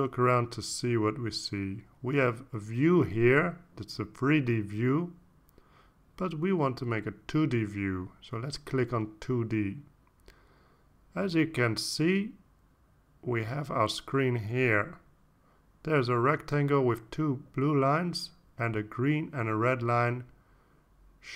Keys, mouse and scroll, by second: 0.1-3.4 drag, 9.9 click, 13.3-14.0 ctrl+scroll down 4, 16.1-18.0 drag, 18.3 ctrl+scroll down 2.